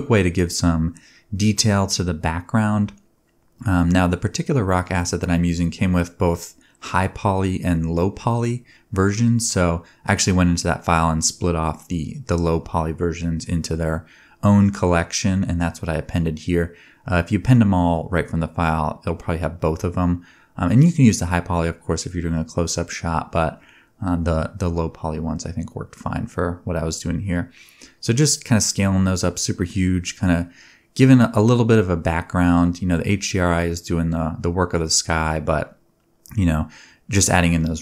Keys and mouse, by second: 0.4-5.3 drag, 1.8 s, 4.1 KP_7, 5.3 g, 6.8-9.7 typing, 7.2-8.8 drag, 9.5 click, 10.7-14.1 drag, 11.0-13.4 typing, 14.2 shift+middle click, 15.1 g, 15.7 s, 16.0 g, 16.4 g, 16.8-18.4 drag, 17.7 s, 18.3 g, 20.0 shift+middle drag, 20.2 middle click, 20.3 shift+middle click, 21.3-23.9 typing, 22.5-23.9 drag, 23.9 middle click, 24.0 shift+click, 24.1 middle click, 24.2-26.7 drag, 25.6 s, 25.9 g, 26.4 g, 26.7 middle click, 27.0 g, 27.0 click, 27.2-27.7 middle drag, 27.7-37.1 shift+drag, 28.1-30.8 typing, 29.6 alt+d, 34.0 r, 34.4 g, 36.4 Tab, 36.8 s.